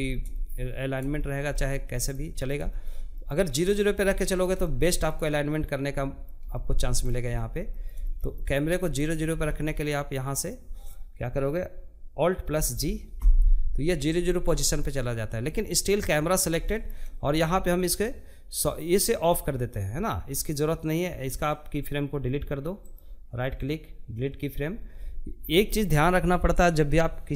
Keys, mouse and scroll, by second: 4.3-4.6 scroll down 1, 4.6-5.7 middle drag, 5.7-6.0 scroll down 2, 6.0-7.9 shift+middle drag, 7.9 scroll up 1, 8.2-11.9 shift+middle drag, 11.9 alt+g, 13.5-19.7 shift+middle drag, 19.7-23.1 drag, 23.1-27.3 right drag.